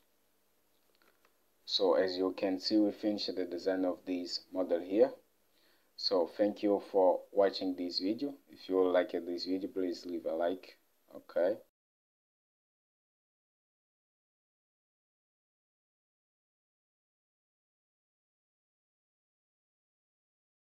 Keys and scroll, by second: 12.0 F8.